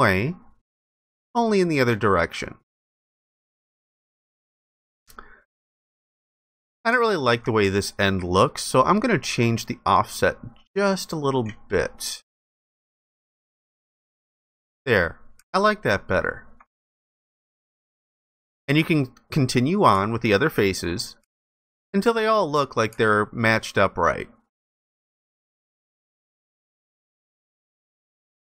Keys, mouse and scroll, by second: 4.9 alt+click, 6.5 alt+click, 14.8 alt+click, 18.0 ctrl+alt+click, 19.8 alt+click, 21.2 alt+click, 23.0 ctrl+alt+click, 26.2 alt+click.